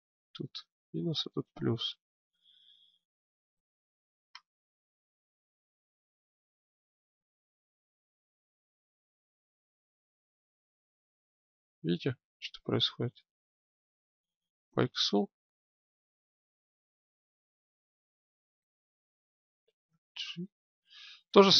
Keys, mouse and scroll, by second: 7.9 g, 19.7 alt+g.